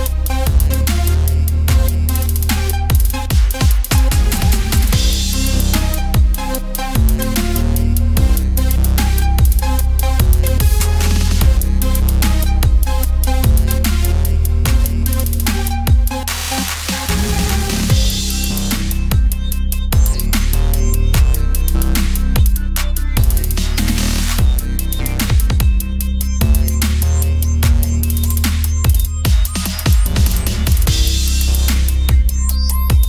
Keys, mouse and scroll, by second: 0.5 middle click, 1.0-1.4 scroll up 1, 1.4 click, 2.0 right click, 2.6 r, 3.2 r, 4.1 s, 4.6 middle click, 5.1 click, 5.6 KP_1, 5.8 middle click, 6.3 s, 7.6-8.6 drag, 8.8-10.0 middle drag, 10.0 click, 10.9 Tab, 11.5 ctrl+r, 13.3 Tab, 13.5 click, 14.2 Tab, 14.6 ctrl+r, 15.1 ctrl+r, 15.8 click, 16.4 ctrl+z, 16.7 o, 17.1 click, 17.9 click, 19.5 ctrl+r, 21.5-22.6 drag, 22.6 s, 24.2 s, 27.7 Tab, 28.4 middle click, 29.9 Tab, 30.2 s, 30.8 Tab, 31.4 click, 31.8 Tab, 32.0 a, 32.2 middle click, 32.5 click, 33.0 middle click.